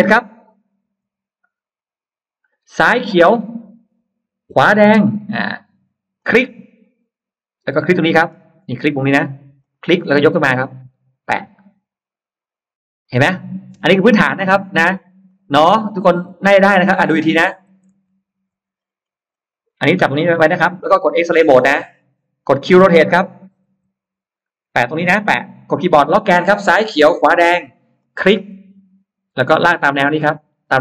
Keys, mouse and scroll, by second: 3.7 Left, 4.8 Right, 6.1 click, 7.8-8.4 scroll up 2, 8.5 middle click, 9.5 click, 9.7 middle click, 13.1 click, 14.0-14.3 scroll down 1, 14.0 space, 15.1 click, 15.7 scroll down 1, 15.9 middle click, 16.4-16.7 scroll down 1, 17.0-17.3 scroll up 1, 17.7 ctrl+z, 18.4-18.7 scroll up 1, 18.9 middle click, 21.5 click, 24.0 q, 26.4 Left, 27.3 Right, 27.9 click.